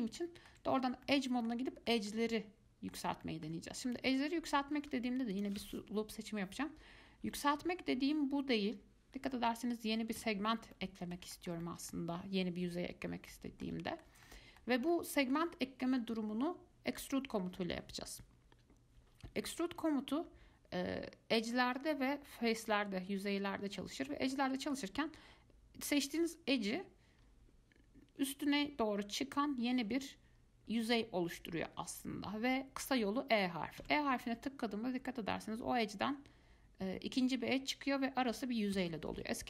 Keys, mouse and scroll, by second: 5.5 alt+click, 7.5 g, 10.9-13.3 middle drag, 13.3 scroll down 1, 13.5-18.1 middle drag, 22.1-22.5 scroll up 1, 22.5-26.3 middle drag, 26.3 click, 34.0 e.